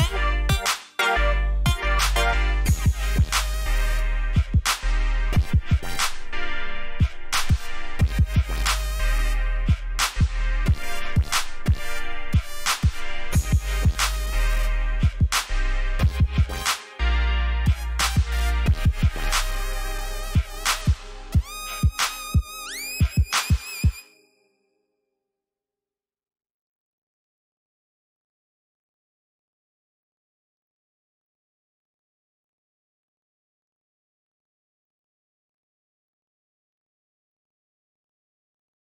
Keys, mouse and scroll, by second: 27.4-27.7 alt+scroll down 1, 27.9-28.6 alt+scroll up 3, 28.9 alt+scroll down 1, 30.0 click, 30.9-32.7 typing, 33.5 click, 34.4-37.1 typing, 38.0-38.5 alt+scroll down 1, 38.7 click.